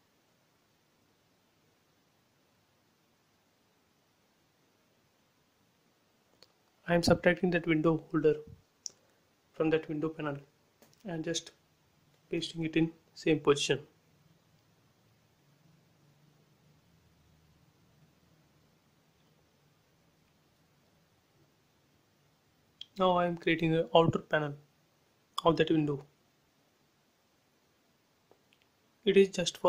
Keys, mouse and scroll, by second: 0.9 scroll up 1, 1.7 click, 2.1 scroll up 1, 2.5 click, 2.9 scroll up 1, 3.6 click, 5.5 ctrl+c, 6.1 click, 8.2 space, 8.4 click, 9.6 Delete, 11.0 click, 11.7 click, 12.3 scroll down 1, 13.4 scroll down 1, 14.6 click, 19.8 shift+middle click, 20.6 scroll up 1, 21.2 shift+middle click, 22.9 r, 25.0 click, 27.5 click, 27.7 space, 28.1 click, 28.8 right click.